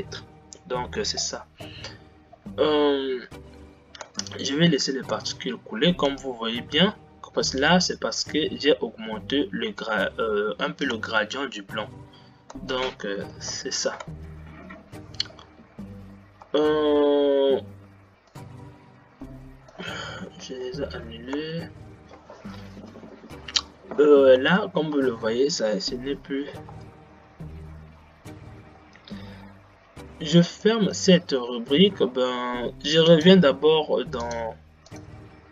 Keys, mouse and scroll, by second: 0.1-2.9 drag, 2.9-4.1 scroll down 9, 4.1 space, 5.5 space, 8.4-11.1 drag, 11.1 space, 12.8 space, 13.7 shift+Left, 14.1 space, 16.9 space, 18.8-20.9 drag, 20.9 shift+Left, 21.5 space, 24.8 space, 27.1 space.